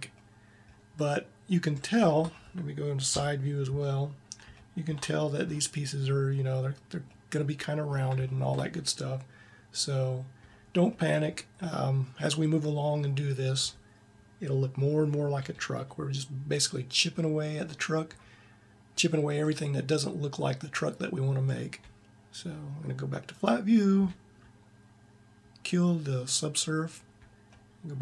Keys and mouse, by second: 2.9 KP_3, 4.6 click, 20.0-23.1 middle drag, 23.1-27.3 drag, 27.3 middle click.